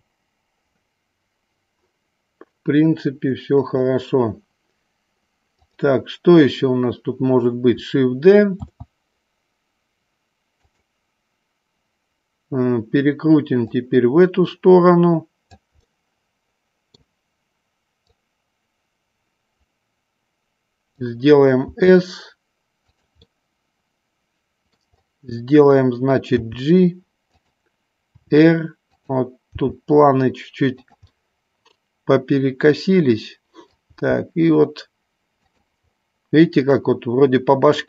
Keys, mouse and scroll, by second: 3.8 click, 5.8 click, 8.9 shift+d, 10.8 click, 13.5-15.6 drag, 16.0-17.0 middle drag, 18.2-21.1 drag, 21.8 s, 23.3 scroll up 1, 23.4-24.9 middle drag, 26.3 g, 28.3 r, 29.0 click, 29.7 g, 30.9 click, 31.1-33.3 middle drag, 33.4 scroll up 2, 33.5 middle click, 34.0 g, 35.5 click.